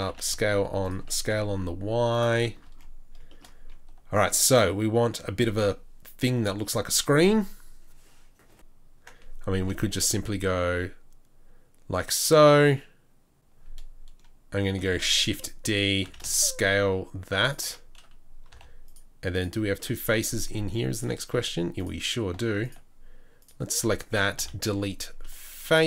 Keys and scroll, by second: 0.1 s, 1.0 s, 9.6 i, 14.9 shift+d, 16.0 shift+d, 16.2 s, 18.5 3, 20.6 2, 24.4 Delete.